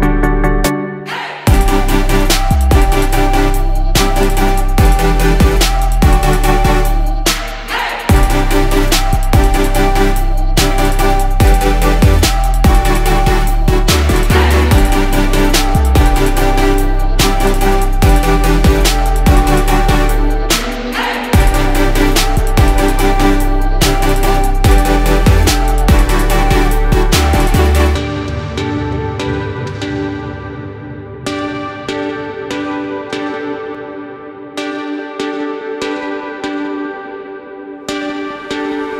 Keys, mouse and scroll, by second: 1.6 click, 2.5 ctrl+z, 3.4-8.5 drag, 8.7-10.8 drag, 10.8 ctrl+z, 11.9-15.2 drag, 17.2 click, 18.8 click, 19.5 click, 20.9 ctrl+click, 21.8 click, 22.4 click, 23.3 shift+click, 23.8 shift+click, 24.3 shift+click, 25.1 shift+click, 25.5 shift+click, 25.7 shift+click, 25.9 shift+click, 26.4 shift+click, 26.7 shift+click, 26.9 shift+click, 27.3 shift+click, 29.1 click, 32.6 click, 33.1 shift+click, 33.3 shift+click, 33.5 shift+click, 33.7 shift+click, 33.9 shift+click, 34.2 shift+click, 34.5 shift+click, 34.7 shift+click, 35.4 click, 37.4 click, 37.9 scroll up 2, 38.8-38.9 scroll down 1.